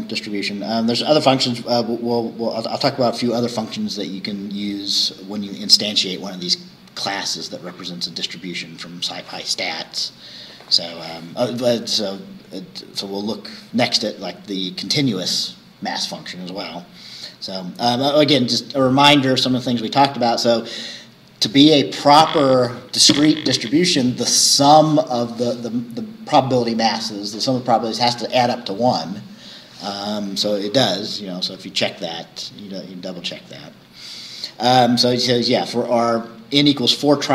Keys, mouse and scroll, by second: 0.1 scroll up 2, 1.7 scroll down 2, 2.8 scroll up 2, 3.7 scroll up 2.